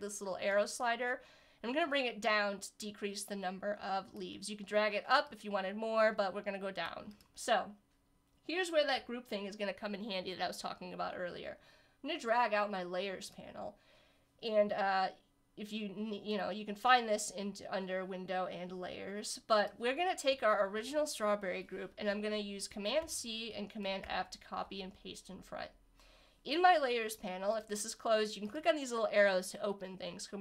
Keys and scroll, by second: 23.0 super+c, 24.0 super+f.